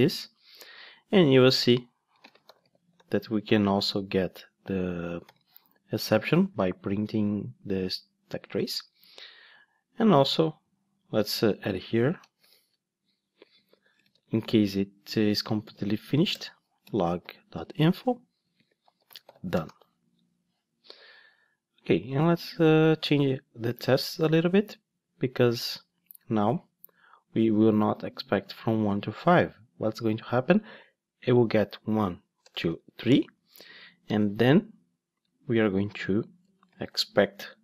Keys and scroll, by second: 3.7 Return, 16.4 Return.